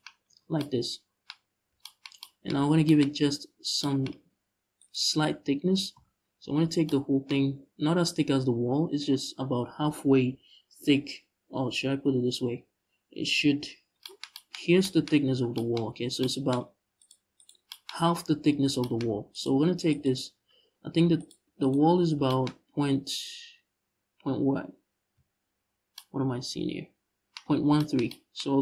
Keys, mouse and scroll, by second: 2.3 scroll up 1, 3.1 Tab, 4.4 right click, 6.2 scroll up 1, 13.4 scroll down 1, 14.3 scroll up 1, 15.5-15.9 scroll up 1, 16.7-17.4 right drag, 18.2 scroll down 1, 19.0 right click, 19.6 right click, 20.2-20.8 scroll up 1, 20.8 right click, 21.2 shift+right click, 22.2-22.6 scroll up 1, 22.6-23.4 scroll down 1, 27.1 scroll down 1.